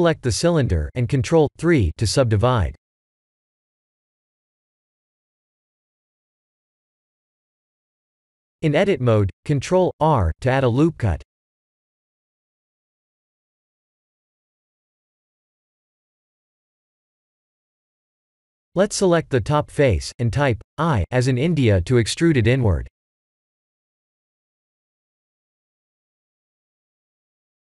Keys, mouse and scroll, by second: 0.9 click, 1.5 ctrl+3, 2.2 middle click, 3.4 shift+middle click, 4.5 KP_1, 5.3 Tab, 6.7 ctrl+r, 10.3 shift+middle click, 11.4 ctrl+z, 13.1 ctrl+r, 17.7 Tab, 18.3 middle click, 19.5 Tab, 19.8 3, 20.1 click, 21.0 middle click, 22.3 i, 24.2 i, 24.7 Tab, 25.1 middle click, 26.6 KP_1, 27.2 scroll down 5.